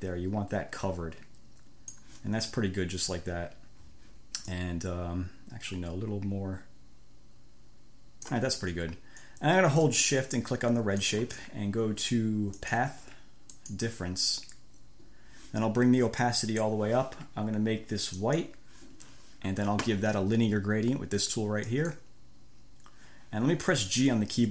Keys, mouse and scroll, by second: 0.0-2.4 drag, 4.8-8.8 drag, 11.2 shift+click, 12.9 click, 13.8 click, 16.5 click, 18.4 click, 22.0 click.